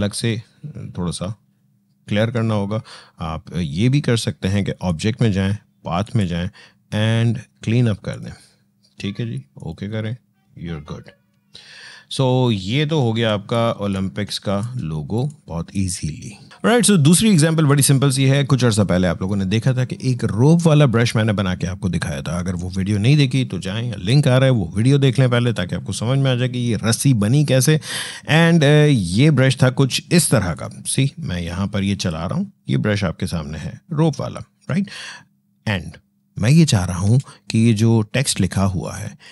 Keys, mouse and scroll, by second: 4.5 click, 11.3-11.7 alt+scroll down 1, 12.9 v, 13.7-16.5 shift+drag, 30.3-32.9 drag, 32.9 alt+scroll up 1, 33.7 alt+scroll down 1, 36.8 ctrl+z, 39.0-39.3 drag.